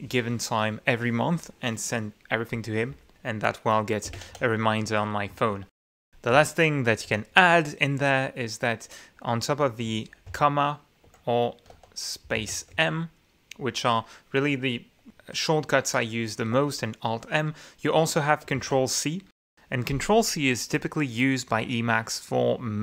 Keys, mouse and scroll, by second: 4.2-6.7 typing, 10.1 ,, 10.9 Escape, 11.6 q, 12.2 space, 12.6 m, 16.9 q, 18.9 ctrl+c.